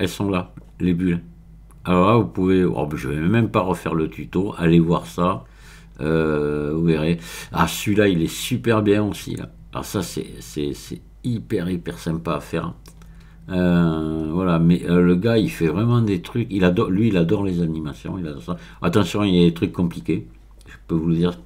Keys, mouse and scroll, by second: 3.8-4.7 scroll up 1, 5.9-8.2 scroll up 2, 12.9-13.9 scroll up 1, 14.2-16.8 scroll up 2, 17.5-18.2 scroll up 1, 18.2-21.4 scroll down 12.